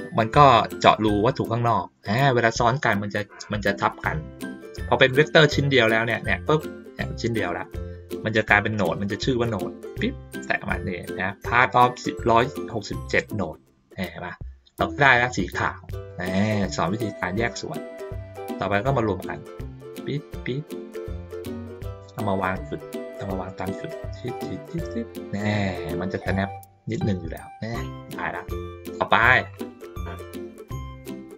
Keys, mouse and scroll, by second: 5.0 click, 5.7 click, 6.6-7.3 drag, 8.7 click, 9.4 click, 14.3 ctrl+middle click, 15.0 ctrl+middle click, 16.1-18.5 drag, 18.8-19.9 ctrl+middle drag, 20.3 ctrl+middle click, 20.9 middle click, 28.3 ctrl+middle click, 28.9 ctrl+middle click, 29.6 middle click.